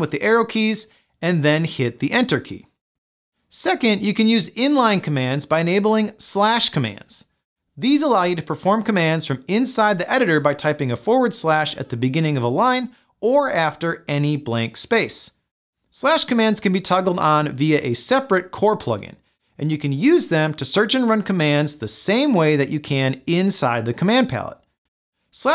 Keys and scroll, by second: 1.1 Return.